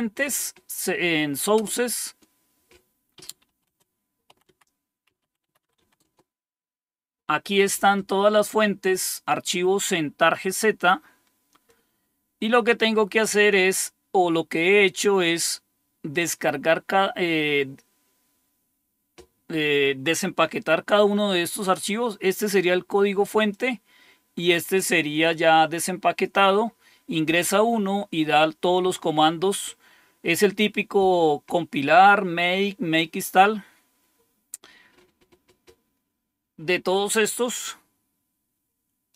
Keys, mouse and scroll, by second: 1.5 Return, 3.2-6.6 typing, 8.6-11.7 scroll up 1, 11.6-13.1 typing, 11.7-15.1 drag, 21.7-23.5 drag, 24.5-26.3 drag, 34.8-37.0 scroll down 3, 39.1 click.